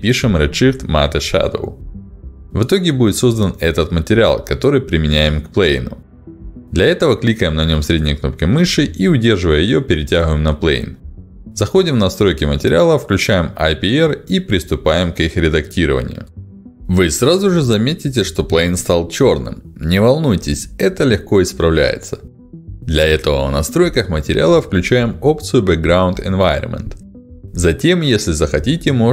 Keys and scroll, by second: 0.0-2.7 typing.